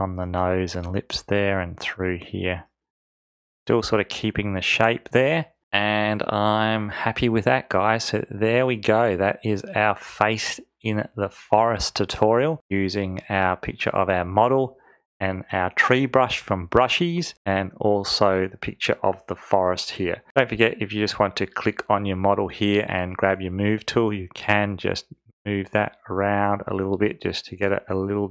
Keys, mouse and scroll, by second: 22.2 click.